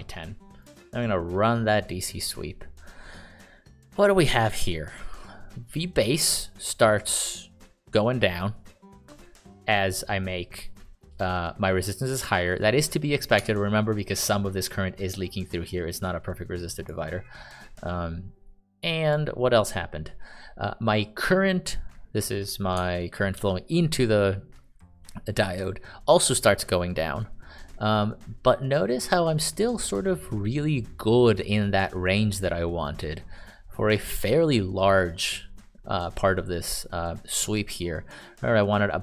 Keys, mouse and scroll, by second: 13.8 Escape, 23.7-39.0 ctrl+d, 24.2-25.4 d.